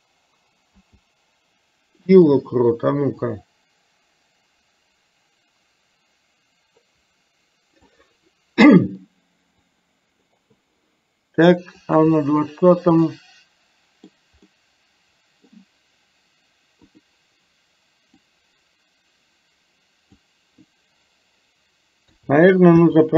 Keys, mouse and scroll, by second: 0.7 i, 3.4-8.0 drag, 9.7 click, 12.0 click, 13.2-14.1 middle drag, 14.5-15.5 middle drag, 16.9 click, 18.4-20.2 drag, 22.2 a, 22.9 i.